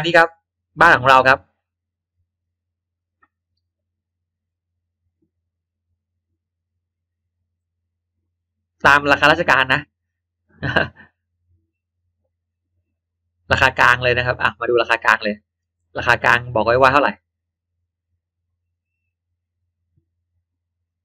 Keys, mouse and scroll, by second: 1.4 click, 6.3 click, 12.4 click, 14.7 click, 16.4-16.7 scroll down 1, 17.8 click, 20.8 click.